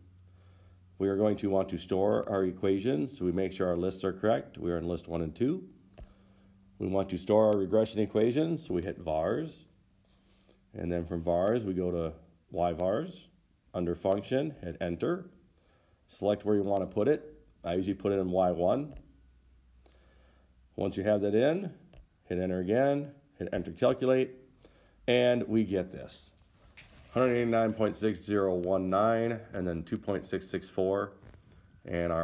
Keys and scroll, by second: 2.4 Return, 6.3 Down, 11.9 Right, 14.9 Return, 19.2 Return, 23.8 Return.